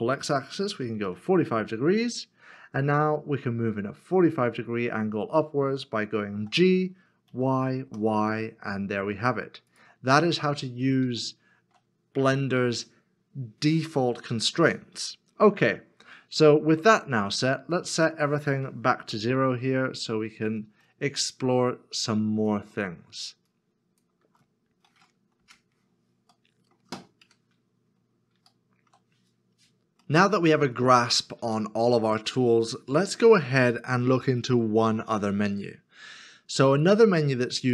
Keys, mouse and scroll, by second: 0.9 x, 1.0 5, 2.6 middle click, 6.3 g, 7.3 y, 10.2 y, 10.2 middle click, 12.2 shift+middle click, 15.7 middle click, 19.0 KP_0, 24.2 KP_0, 25.4 Return, 27.2 middle click, 28.0 scroll down 1, 29.6 shift+middle click, 30.0 shift+middle click, 30.9-31.4 scroll down 1, 31.7 shift+middle click.